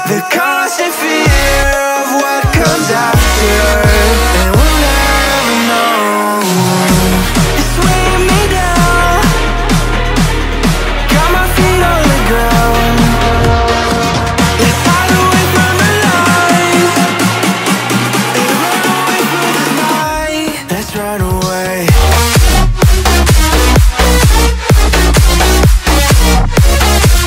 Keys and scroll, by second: 5.9 Down, 13.2 ctrl+g.